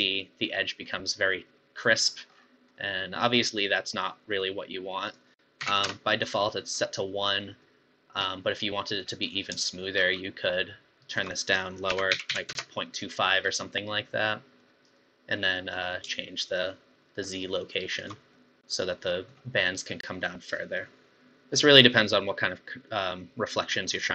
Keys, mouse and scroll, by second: 2.0-2.7 scroll up 10, 2.7-5.1 middle drag, 5.1-6.9 drag, 6.9-9.8 middle drag, 9.8-11.2 shift+drag, 11.4-13.4 drag, 13.4-13.7 scroll down 4, 13.7-16.4 middle drag, 16.4-18.4 shift+drag, 18.4-20.2 middle drag, 20.2-20.9 scroll up 10, 20.9-22.2 middle drag, 22.2-22.9 scroll up 1, 22.9-24.1 middle drag.